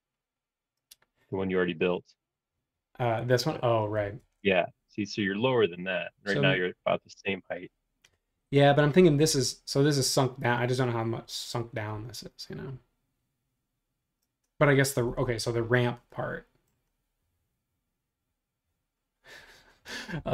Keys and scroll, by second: 4.2 super+Tab, 9.4 super+Tab, 15.1 super+Tab.